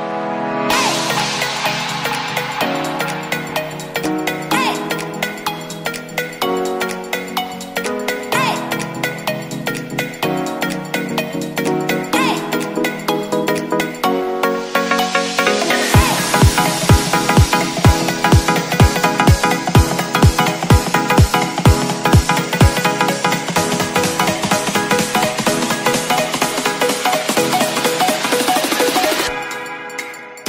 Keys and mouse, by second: 0.2 right click, 1.1 click, 3.6 click, 5.6 click, 6.7 ctrl+s, 7.0 a, 7.1 a, 8.8 click, 9.5 ctrl+z, 10.5 click, 11.4-14.5 drag, 12.7 o, 13.5 Return, 18.0 middle click, 18.7-24.3 drag, 26.2 middle click, 27.3 a, 27.4 a.